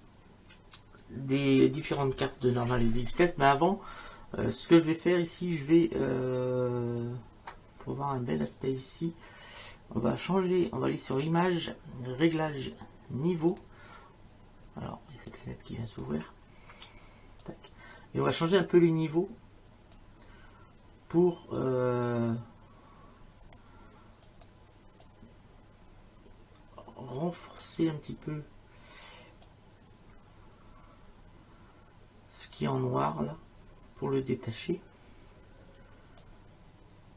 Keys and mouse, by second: 11.2 click, 13.5 click, 15.3 click, 17.4 click, 19.9 click, 24.3 click, 29.5 click, 36.2 click.